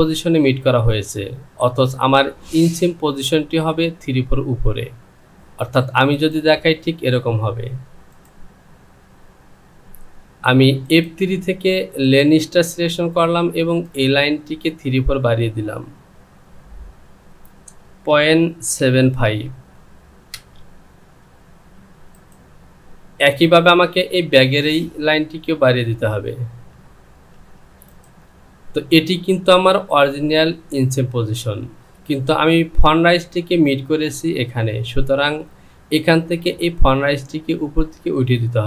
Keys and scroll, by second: 18.1 KP_Decimal, 26.6 Down, 27.3 Down.